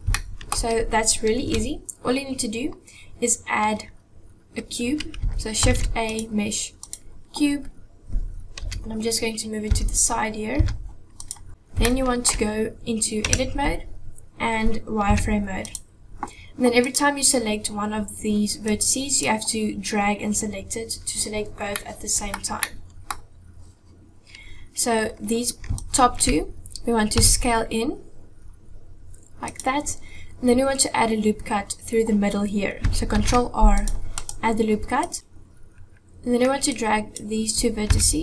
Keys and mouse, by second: 0.1 shift+middle click, 1.4 KP_1, 5.5 shift+a, 8.6 KP_7, 9.7 g, 11.5 KP_1, 11.9-12.2 shift+middle drag, 13.3 Tab, 15.1 z, 16.8 click, 18.7 click, 21.7 middle click, 22.7 middle click, 25.8 shift+click, 27.1 s, 33.1 ctrl+r, 35.0 click, 36.7 click, 37.9 g.